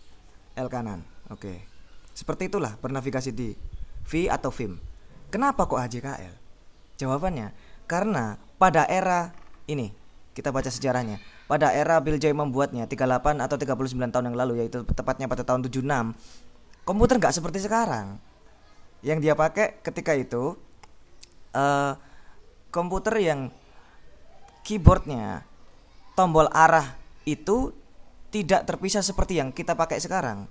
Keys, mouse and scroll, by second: 1.5 j, 2.1 l, 2.9 h, 10.2 scroll down 2, 22.3 click.